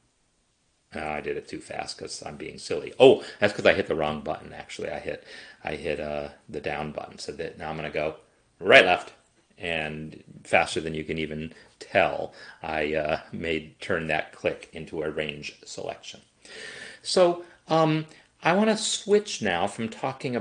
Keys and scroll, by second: 8.6 shift+Right, 8.7 shift+Left.